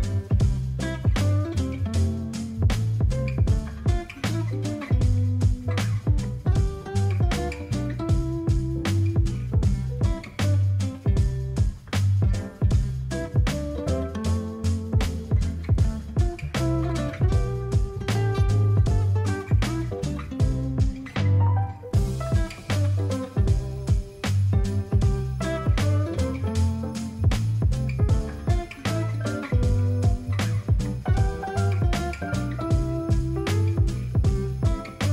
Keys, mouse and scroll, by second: 1.0-1.4 alt+scroll, 4.0 alt+scroll, 8.9 ctrl+j.